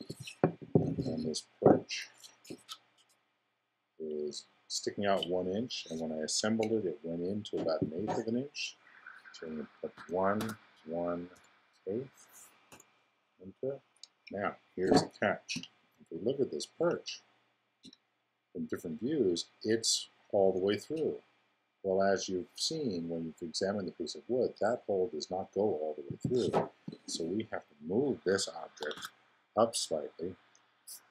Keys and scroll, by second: 10.0 i, 15.5 1, 16.7 0, 28.9 super+m.